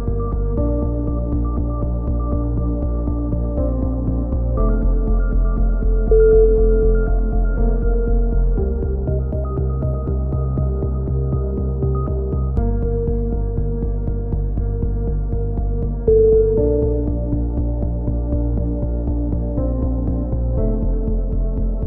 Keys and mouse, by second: 1.7 ctrl+KP_3, 1.9 z, 2.1 z, 2.2-2.6 drag, 3.7-6.2 typing, 7.8 KP_3, 9.0 z, 9.1 Tab, 10.1 KP_3, 10.2 z, 10.4 z, 13.1 KP_7, 13.8 ctrl+r, 14.4 z, 14.9 z, 15.8 z, 15.8 a, 16.6 middle click, 17.4 KP_3, 17.5 z, 18.4-18.9 drag, 20.0 z, 20.3 a, 20.6 Tab, 20.9-21.3 drag.